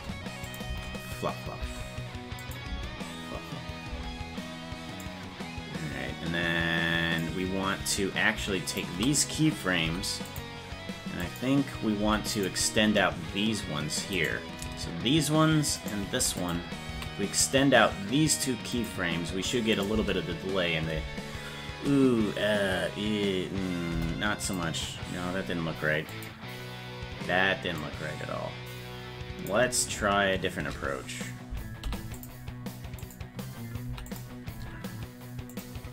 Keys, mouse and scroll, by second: 0.4 click, 0.6 space, 2.4 click, 2.6 space, 5.0-7.1 drag, 8.7 shift+right click, 9.8 i, 11.2 click, 12.0 i, 14.1 right click, 15.8 shift+right click, 16.4 click, 17.0 s, 19.8 click, 20.0 space, 24.0 Delete, 26.2 click, 27.8-29.5 drag, 31.9 i, 33.1 click, 33.9 i, 35.6 click.